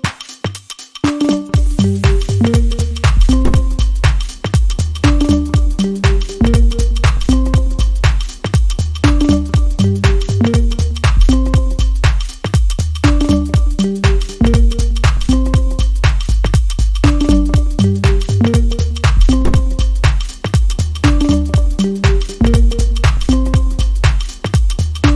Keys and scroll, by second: 0.1-0.5 scroll down 1, 0.8 scroll up 1, 4.3 scroll up 1, 7.5 scroll down 1, 7.7-8.1 scroll up 1, 8.9-9.2 scroll down 1, 9.4-9.8 scroll up 1, 15.8-16.2 scroll down 1, 19.4 scroll down 1, 19.5 scroll up 1, 20.2 scroll up 1, 23.0 scroll down 1, 23.3 scroll up 1, 23.5 scroll down 1, 23.7-24.0 scroll up 1.